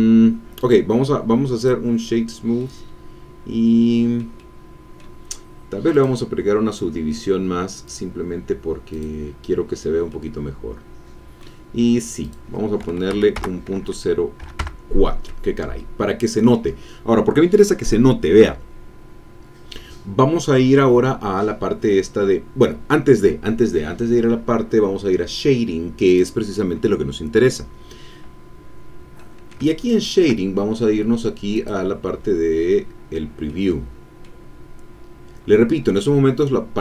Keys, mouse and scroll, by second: 0.6-1.8 drag, 2.5-5.1 middle drag, 5.9 click, 7.9 click, 8.9 click, 10.1-11.6 drag, 12.2 click, 13.1 Right, 13.3 BackSpace, 14.6 KP_Enter, 15.7-17.7 drag, 17.7-18.8 scroll down 4, 18.8-21.0 scroll down 1, 26.0 click, 28.5-29.0 scroll up 1, 29.1-30.4 middle drag, 31.5 click, 33.4 middle click, 34.6-36.8 scroll up 2.